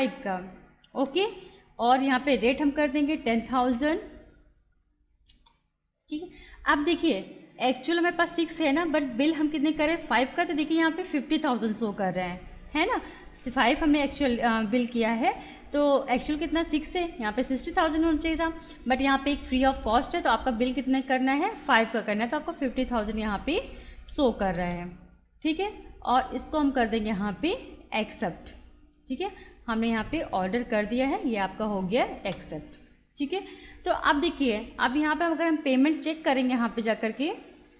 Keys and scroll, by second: 1.1 Return, 3.0 1, 3.3 0, 5.3 Return, 23.5 Return, 28.1 Return.